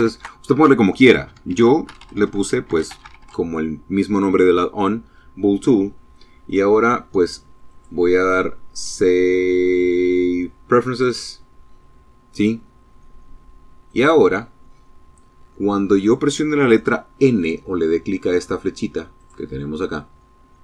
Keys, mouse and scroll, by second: 0.2-1.9 typing, 5.3 click, 6.4 click, 9.6 click, 12.6 click, 17.9 click.